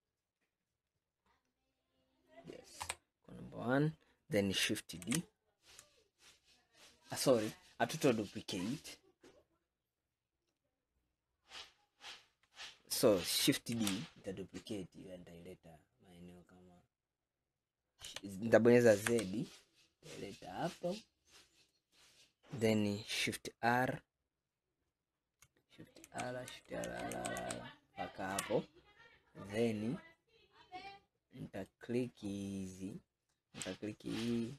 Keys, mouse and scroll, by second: 1.5 scroll down 3, 2.2 scroll up 2, 2.9 KP_1, 5.1 shift+d, 13.8 shift+d, 26.1 shift+r, 26.6 shift+r, 31.7 click, 34.2 click.